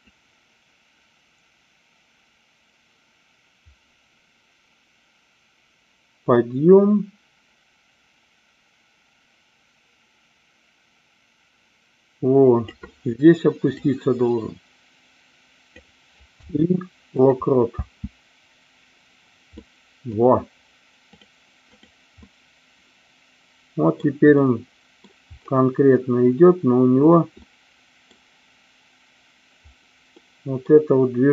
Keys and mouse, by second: 0.1-12.8 drag, 13.9-15.8 drag, 16.3 i, 17.7 space, 19.5 middle click, 21.6 click, 22.3-23.9 middle drag, 24.3 middle click, 27.3 middle click, 30.1 middle click.